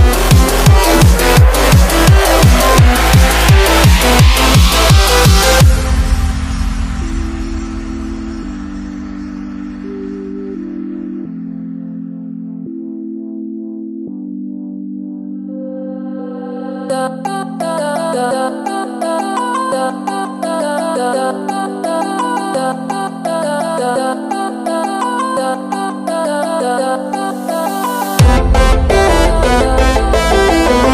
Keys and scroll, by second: 3.4 super+z, 17.0 super+z, 24.4 alt+super+z.